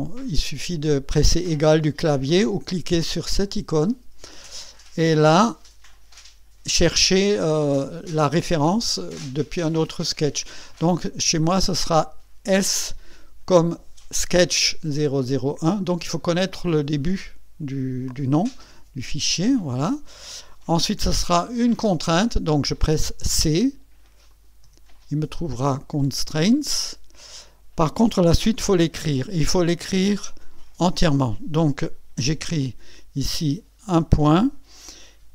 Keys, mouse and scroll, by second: 3.4 click, 12.4 s, 19.2 click, 23.2 c, 24.3 click, 24.6 c, 26.7 click, 30.9 KP_Decimal, 32.6 click, 33.9 KP_Decimal.